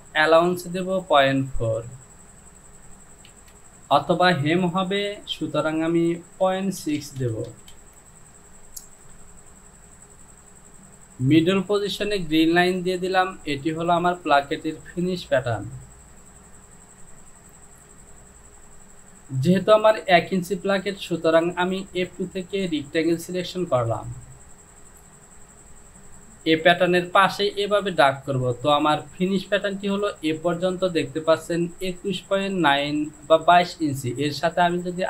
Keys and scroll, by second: 3.5 Down, 6.7 KP_Decimal, 6.9 KP_6, 7.0 Down, 7.3 KP_Decimal, 7.5 KP_6, 7.8 Down.